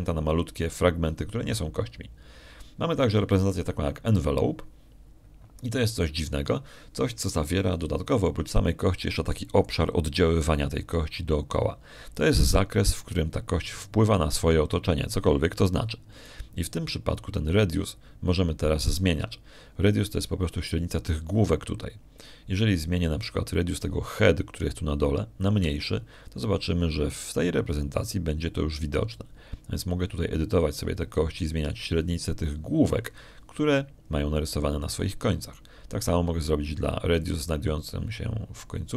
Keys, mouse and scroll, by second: 5.0 click, 27.3-37.0 shift+drag.